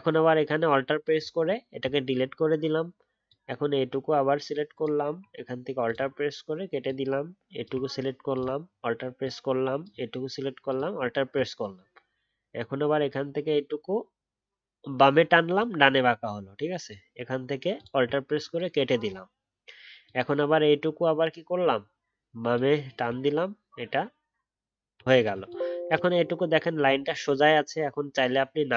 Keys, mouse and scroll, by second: 1.1 alt+click, 10.9-15.8 alt+scroll up 1, 17.7 alt+click.